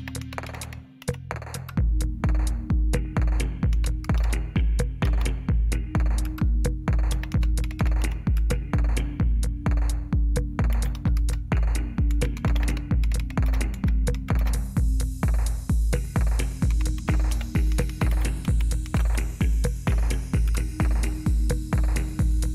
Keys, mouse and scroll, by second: 0.0-1.5 typing, 1.5 Return, 3.5-5.0 typing, 6.2-8.5 typing, 10.4-14.3 typing, 16.4-19.4 typing, 20.4 Return.